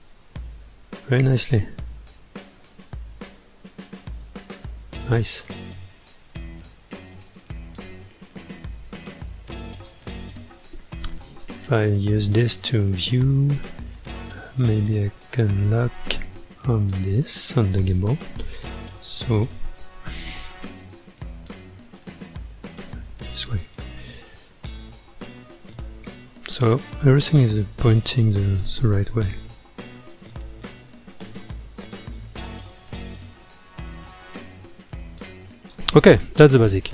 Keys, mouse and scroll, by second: 2.8 space, 4.3 space, 4.6-5.4 scroll down 10, 5.5 middle click, 6.1 space, 7.2 space, 7.5-9.4 middle drag, 9.4 space, 9.9 space, 10.7 click, 12.5 click, 15.6 click, 18.9-21.9 middle drag, 21.9 scroll down 1, 22.6-23.5 middle drag, 23.5 space, 27.4-30.1 middle drag, 30.1 click, 31.0-31.6 middle drag, 31.6-32.0 scroll up 4, 32.5 scroll up 6, 32.8-34.2 middle drag, 34.2-34.5 scroll down 1, 35.7 space.